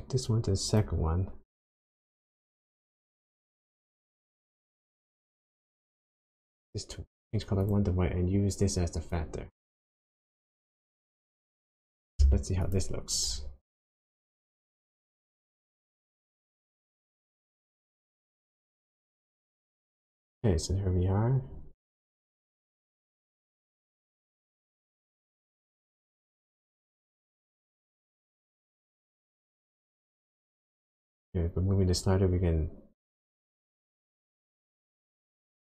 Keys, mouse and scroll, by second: 2.9 click, 7.6 click, 9.1 click, 12.8 ctrl+shift+click, 17.3-18.0 scroll down 1, 22.5-23.7 scroll up 9, 23.3 middle click, 27.9 click.